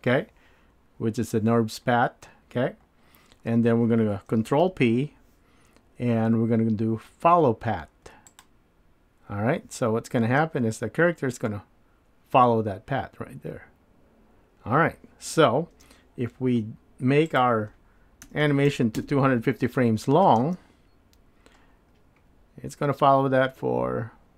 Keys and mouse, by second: 4.6 ctrl+p, 10.2 space, 15.8 space, 17.3-24.3 drag.